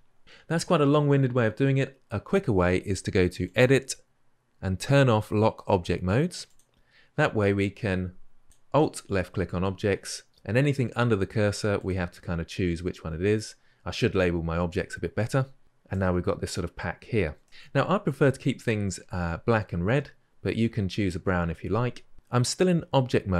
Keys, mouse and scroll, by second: 15.7-16.6 middle drag, 16.6-17.2 scroll up 4, 17.2 shift+middle drag, 17.5-23.3 scroll down 2.